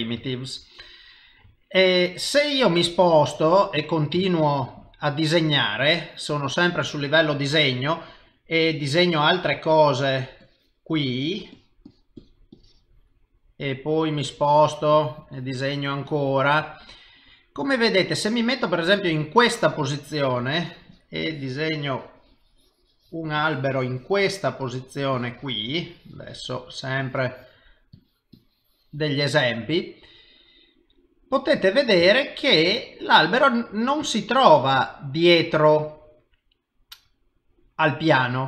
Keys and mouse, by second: 0.3 ctrl+middle click, 2.3 middle click, 4.4 ctrl+middle click, 4.9 middle click, 8.6 click, 10.4 click, 11.0 click, 11.5 click, 11.9 click, 12.2 click, 12.6 click, 13.1 middle click, 14.9 click, 15.5 click, 16.1 click, 16.6 middle click, 20.1 click, 20.4 click, 21.1 click, 23.4 click, 25.1 click, 25.8 click, 26.7 click, 28.0 click, 28.4 click, 29.4 middle click, 32.3 ctrl+middle click, 32.9 middle click, 35.3 c.